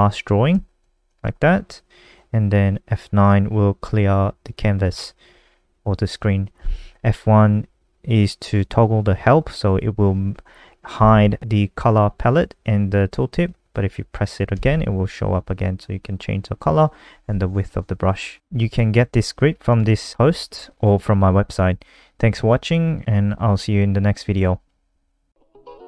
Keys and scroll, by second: 0.5 ctrl+z, 0.8 ctrl+z, 1.0 ctrl+z, 5.3 F9, 11.0 F1.